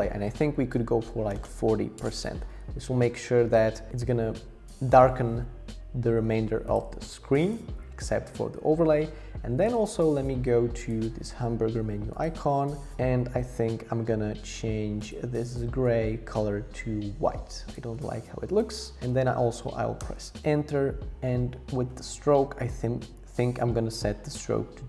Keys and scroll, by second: 1.0-1.9 typing, 2.0 Return, 20.0 Return, 22.3 Down, 22.8 Down, 23.7 Up, 24.0 Down.